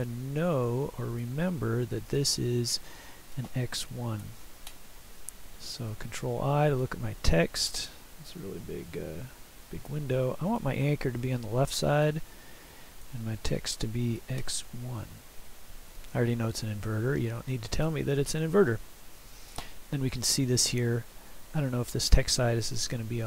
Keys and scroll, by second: 4.3 ctrl+i, 14.2 x, 22.5 s.